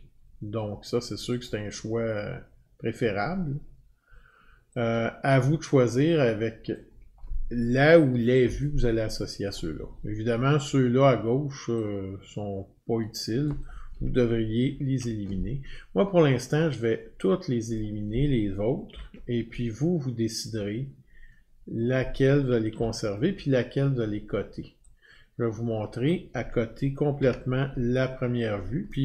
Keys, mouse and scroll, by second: 1.4 click, 6.7 click, 13.6 click, 14.7 ctrl+3, 17.7 click, 18.9 ctrl+3, 21.7 click, 22.7 ctrl+3, 23.6-23.9 scroll, 26.0 click, 27.1-29.0 ctrl+3.